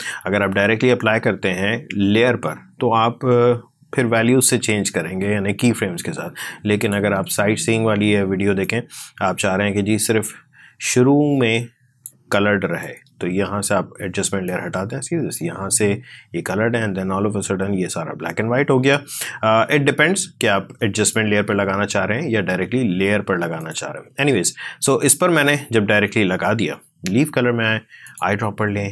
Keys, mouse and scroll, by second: 1.7-3.6 scroll down 1, 6.7-23.4 drag, 26.6-27.9 scroll down 1, 27.9-28.9 drag.